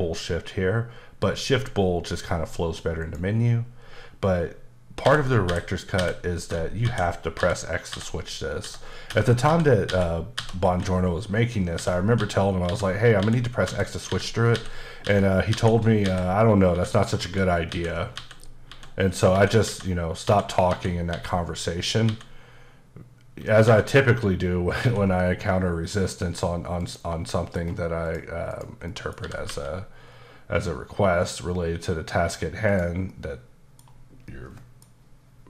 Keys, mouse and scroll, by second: 3.0 click, 5.0-7.9 typing, 11.5-15.0 typing, 23.6 x, 24.8 x, 25.9 click, 26.8 click, 27.3 middle click, 28.0 click, 28.5 click, 28.9 middle click, 29.2 scroll up 1, 32.7 click, 33.1 middle click, 34.2 middle click.